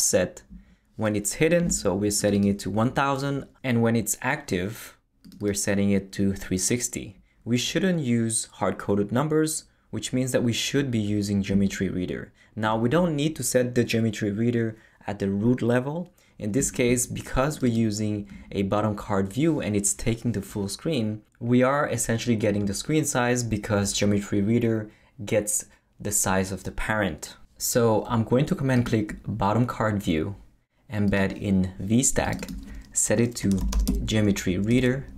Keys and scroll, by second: 33.3-34.4 typing, 34.7 Return.